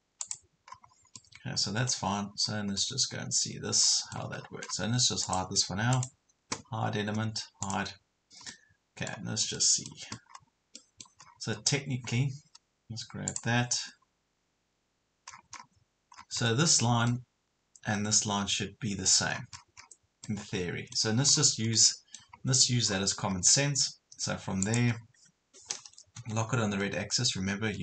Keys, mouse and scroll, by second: 0.7 scroll up 1, 1.2-2.3 middle drag, 2.8-4.3 middle drag, 4.4 scroll down 1, 5.2 click, 6.0 right click, 7.6 click, 8.5 middle click, 10.3 scroll up 1, 10.8 middle click, 11.2 scroll down 1, 13.3 click, 13.9 scroll up 1, 14.5 scroll up 1, 15.3 scroll down 1, 17.5 scroll up 1, 19.4 scroll down 1, 20.3 middle click, 21.3 scroll down 1, 21.8 middle click, 22.4 scroll up 1, 24.6 click, 25.1 scroll down 1, 26.2 Left, 26.7-27.8 typing.